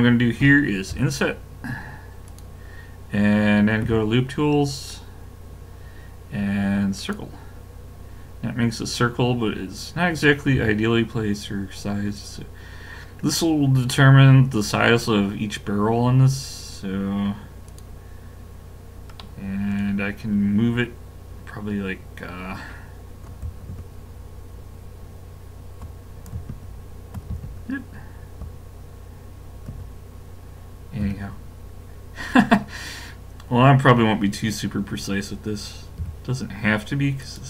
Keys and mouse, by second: 0.9 i, 3.8 w, 8.5-10.5 middle drag, 10.5 s, 19.2-23.7 middle drag, 23.7 shift+KP_7, 26.5 ctrl+KP_7, 27.4 shift+KP_7, 29.7 KP_7, 31.1 KP_5, 36.0 r.